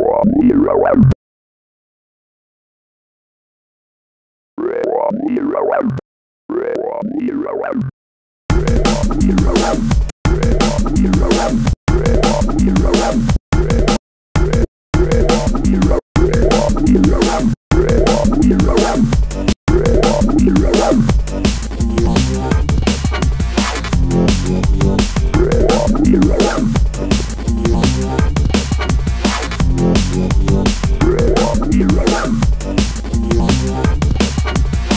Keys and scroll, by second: 3.6 space, 5.5 space, 7.1 space, 9.3 space, 11.0 space, 12.6 space.